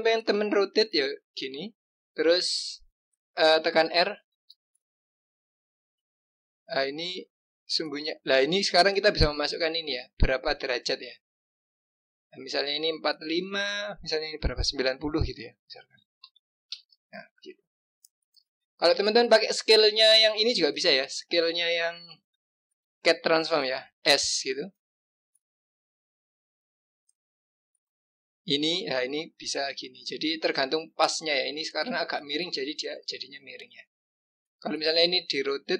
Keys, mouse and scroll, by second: 0.2 click, 0.6-1.3 scroll up 2, 1.3-4.3 scroll down 2, 4.3 r, 17.4 click, 17.7-18.1 scroll up 2, 18.4-20.6 scroll down 2, 20.6 click, 24.0 s, 32.9 click, 33.4-35.1 scroll up 2, 35.1 click.